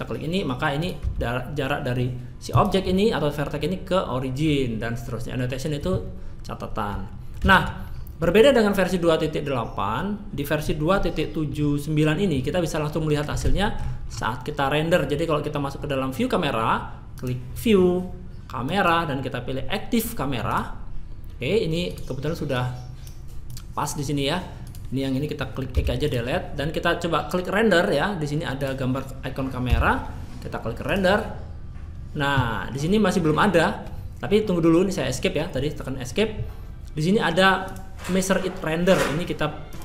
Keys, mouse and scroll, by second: 1.0-1.8 drag, 1.0 g, 17.2-19.2 drag, 22.5-30.9 drag, 22.5-23.8 right drag, 33.8 Escape, 39.7-39.8 drag.